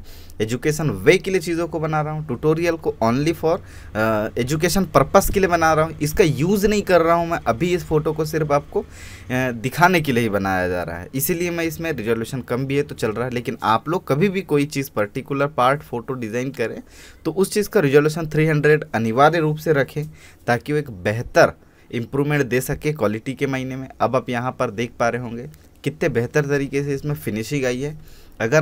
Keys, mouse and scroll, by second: 0.7 space, 0.9 click, 1.2 space, 1.7-2.0 alt+scroll down 1, 2.1-7.2 drag, 12.8 alt+scroll down 1, 13.3 alt+space, 25.8 click, 28.4 space, 28.5 click.